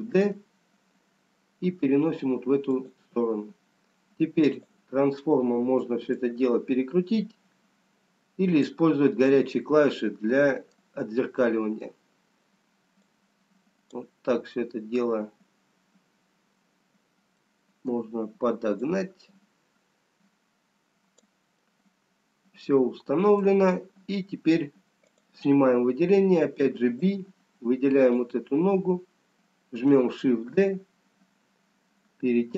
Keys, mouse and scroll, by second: 0.3 shift+d, 4.7 click, 6.4 click, 11.8 middle click, 14.3 click, 17.3-19.5 scroll down 1, 19.5 middle click, 19.5 click, 21.9 middle click, 25.2 click, 27.0 b.